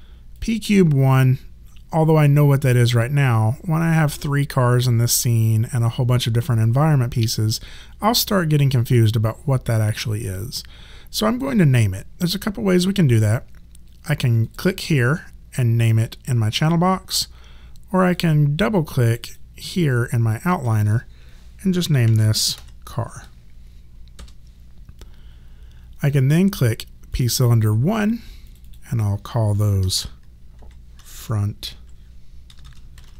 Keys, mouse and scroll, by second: 0.3 click, 14.5 click, 18.0 click, 21.8-23.0 typing, 24.2 Return, 24.2 KP_Enter, 27.1 click, 30.0-33.1 typing.